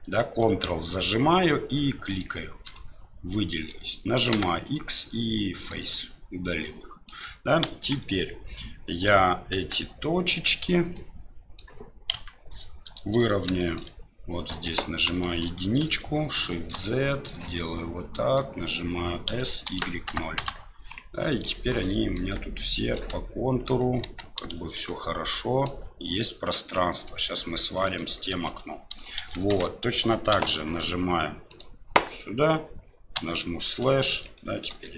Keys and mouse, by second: 2.1 ctrl+right click, 2.8 middle click, 4.3 x, 6.6 middle click, 7.6 KP_1, 9.5 KP_3, 10.9 middle click, 12.1 KP_3, 13.6 shift+middle click, 14.6 1, 15.2 shift+middle click, 15.8 shift+z, 16.5 middle click, 17.3-18.4 drag, 19.3 s, 21.6 middle click, 22.0 middle click, 22.9 Tab, 24.0 Tab, 24.5 shift+z, 24.8 middle click, 27.7 middle click, 28.3 shift+z, 29.2 shift+z, 29.5 Tab, 30.3 KP_Divide, 31.5 right click, 33.1 KP_Divide, 33.8-34.1 middle drag, 34.3 shift+middle drag.